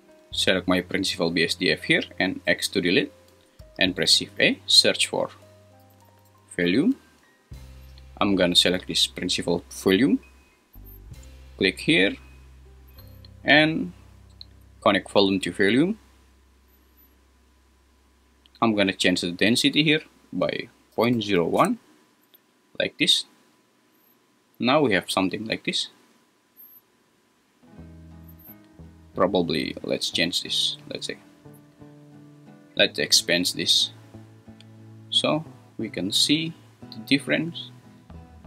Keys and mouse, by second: 0.3 g, 2.5 x, 3.6 shift+a, 14.6-15.8 drag, 19.3-21.6 drag, 32.9-34.9 drag, 37.6-38.4 drag.